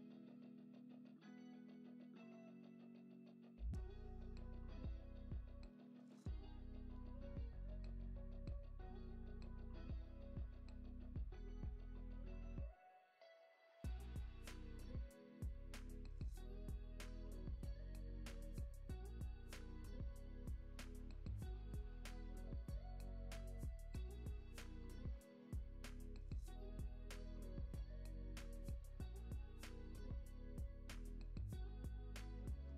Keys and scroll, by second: 1.2 Right, 1.7 Right, 2.5 Right, 5.0 super+d, 6.5 i, 8.0 Right, 8.5 Right, 9.1 Right, 9.8 Right, 10.4 Right, 12.1 super+d, 29.1 Right, 29.6 Right, 30.1 Right, 30.7 Right.